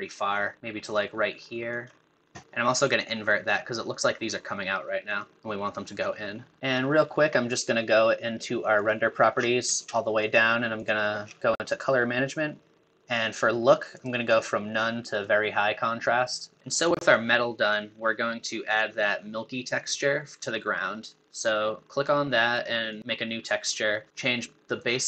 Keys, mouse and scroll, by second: 11.0-13.1 scroll up 1, 13.1-13.9 scroll up 1, 13.9-15.3 scroll up 1, 15.3-18.9 scroll up 1, 18.9-20.3 scroll up 1, 20.3-21.6 scroll up 1, 21.6-23.0 scroll up 1, 23.0-25.0 scroll up 1.